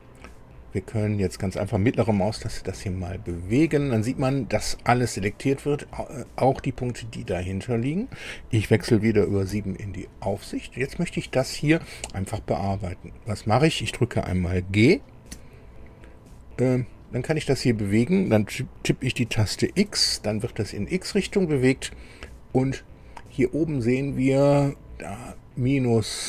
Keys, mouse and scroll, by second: 19.7 x.